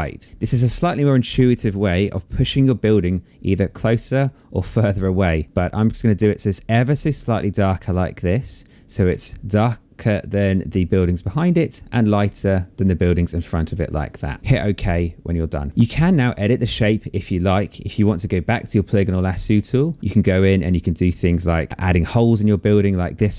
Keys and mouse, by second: 10.0 click, 14.8 click, 16.8 click, 18.8 click, 21.6 click.